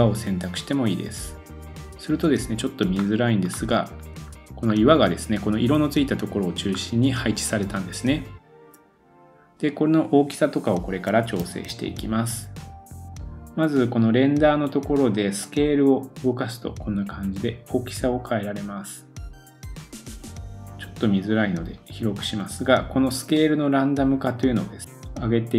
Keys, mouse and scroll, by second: 2.5-3.9 scroll up 5, 3.9-4.7 scroll down 4, 4.7-6.0 scroll up 3, 6.0-6.6 scroll down 2, 6.6-7.8 scroll up 2, 7.8 scroll up 1, 9.2 middle click, 9.2 scroll up 1, 9.9-11.2 middle drag, 11.2 super+click, 11.4 super+s, 11.6-15.4 middle drag, 15.4-21.4 drag, 21.5 click, 21.7 click, 22.0-25.5 drag.